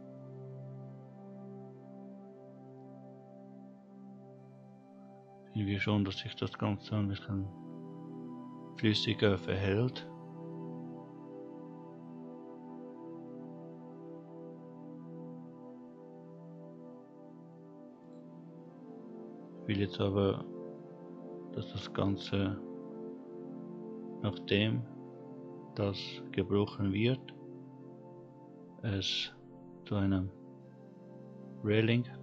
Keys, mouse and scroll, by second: 18.1 click, 23.8-25.1 scroll down 1, 28.0-30.4 scroll down 3.